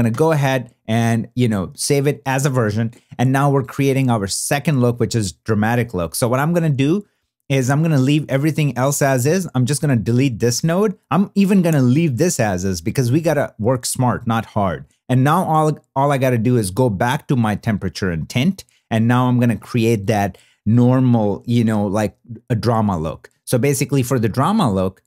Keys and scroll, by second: 0.1 super+y.